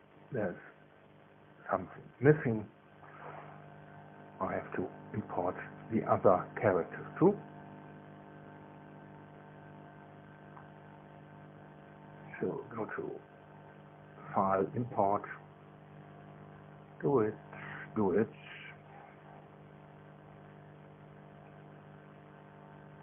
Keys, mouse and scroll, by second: 0.4-1.1 scroll down 1, 1.1-1.9 scroll down 1, 1.1 space, 1.9-2.3 scroll down 1, 4.0-6.1 scroll down 1, 6.1-7.0 scroll down 1, 7.4 scroll up 1, 11.6 click, 15.0 click.